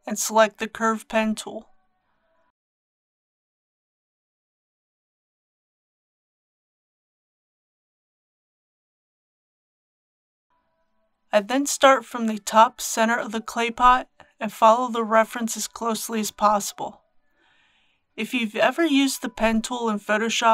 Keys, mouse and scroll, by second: 0.6 x, 1.5 click, 19.5-19.9 scroll up 1.